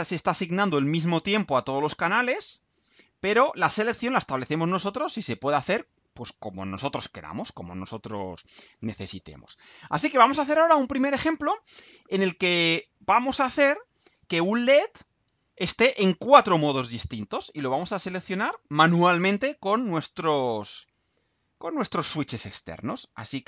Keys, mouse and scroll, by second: 9.7-10.5 scroll down 4, 11.1-11.5 scroll down 1, 12.1-12.5 scroll up 1, 13.3-13.8 scroll down 2, 14.3-14.7 scroll down 2.